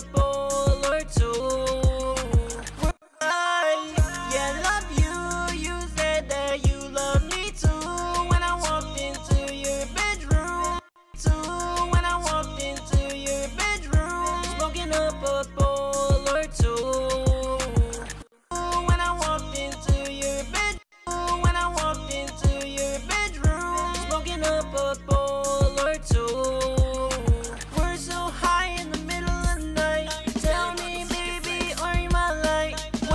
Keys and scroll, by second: 0.2 e, 2.2 typing, 5.4 ctrl+Up, 5.6 typing, 8.3 ctrl+shift+Down, 8.5 ctrl+shift+Down, 20.1 space, 23.3 ctrl+shift+x, 24.3 ctrl+x, 25.9 ctrl+shift+x, 26.2 super+s, 27.0 ctrl+shift+x, 28.2 typing, 29.2 ctrl+shift+x, 31.3 ctrl+shift+x, 31.6 super+s, 32.0 super+Tab.